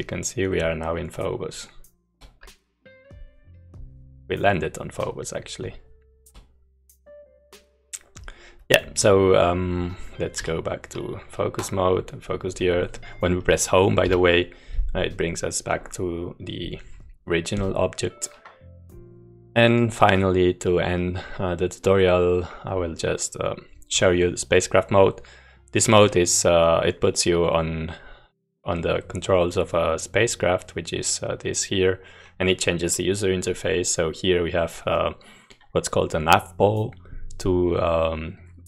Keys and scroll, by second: 0.0-0.3 typing, 1.4-1.9 s, 5.7-6.2 space, 6.9-7.4 a, 8.0 a, 14.1 Home.